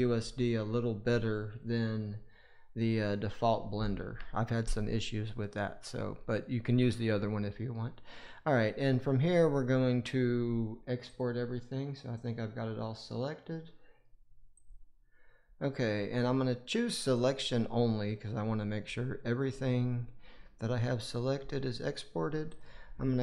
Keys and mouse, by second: 11.0-14.6 drag.